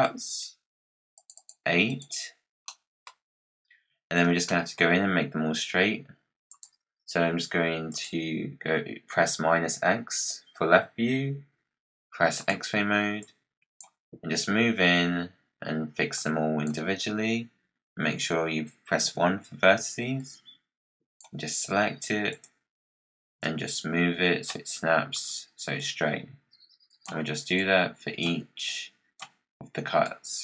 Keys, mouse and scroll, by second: 2.6 middle click, 3.1-3.6 scroll down 2, 3.9-4.3 scroll up 7, 4.4-6.4 middle drag, 6.4-7.9 drag, 11.4 scroll up 2, 12.3-13.9 drag, 13.9-15.4 scroll up 9, 16.1-18.9 drag, 18.9 1, 20.1 click, 22.2-23.4 drag, 25.8-27.5 drag, 28.6 click, 29.9-30.4 drag.